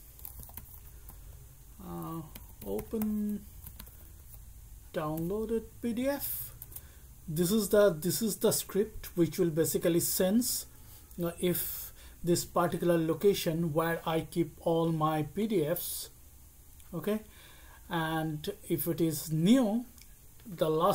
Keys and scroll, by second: 0.0-4.7 typing, 5.1 Tab, 6.6 Return.